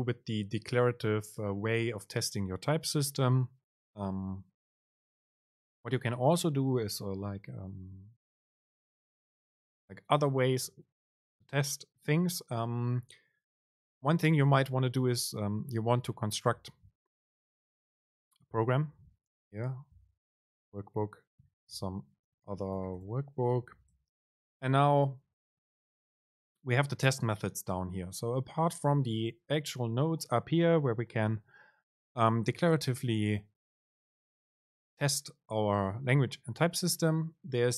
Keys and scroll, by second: 16.7 Return, 17.6 super+space, 25.7 Up.